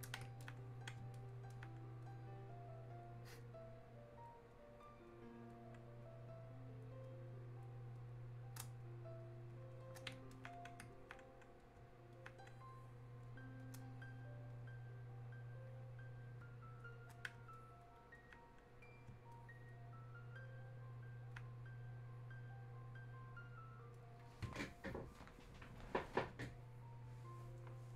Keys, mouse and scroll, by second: 0.4-26.5 alt+drag.